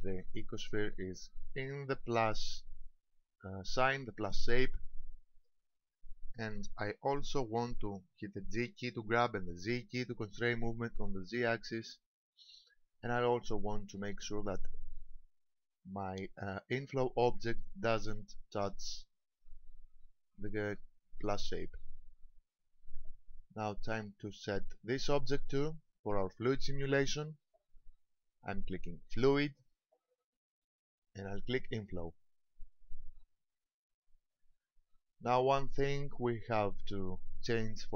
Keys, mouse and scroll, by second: 0.8-1.2 scroll up 2, 1.6 shift+middle click, 5.6-7.1 scroll up 1, 8.7 g, 19.4 ctrl+click, 19.9-21.0 scroll down 4, 21.8 middle click, 26.1 click, 29.2 click, 32.8 click.